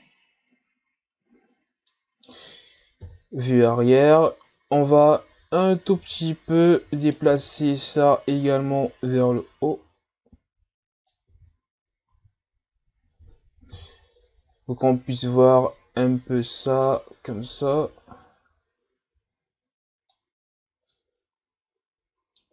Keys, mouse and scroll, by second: 3.0 ctrl+KP_1, 4.0-5.0 scroll up 4, 5.0-5.5 scroll down 3, 5.5-6.0 scroll up 1, 6.0 z, 7.1 right click, 7.3 b, 9.4-11.3 drag, 11.3 z, 12.1 Tab, 12.9 a, 13.7 KP_1, 15.2 Tab, 16.0-20.9 drag, 20.9-22.5 middle drag.